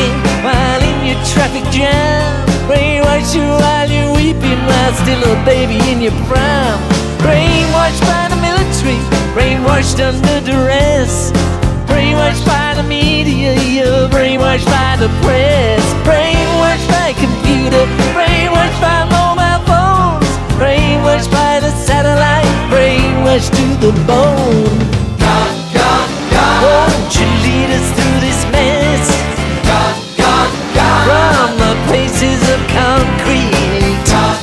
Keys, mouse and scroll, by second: 2.1-3.7 drag, 4.6 click, 7.5 z, 9.7 click, 10.9-12.2 drag, 12.9 click, 14.0 click, 15.1-16.8 drag, 17.6 click, 19.5 click, 20.3 click, 21.0-23.9 drag, 25.4 click, 27.9-29.6 drag, 30.1-31.5 drag, 32.0 click, 33.6 click.